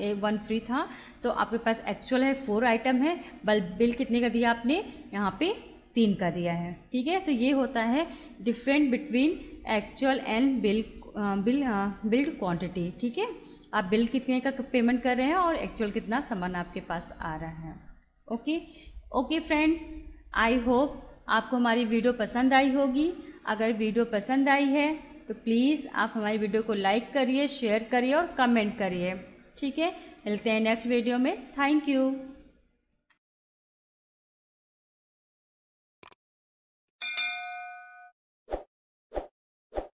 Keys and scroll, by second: 17.9 Escape.